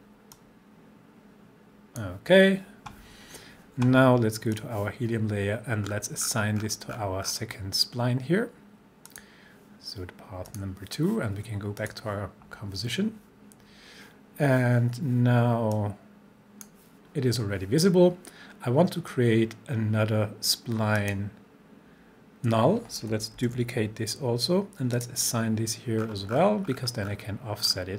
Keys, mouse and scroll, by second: 4.5 click, 5.9 scroll down 1, 9.1 click, 15.7-16.7 drag, 21.0 click, 23.4 ctrl+d, 25.0 click, 26.0 scroll down 1.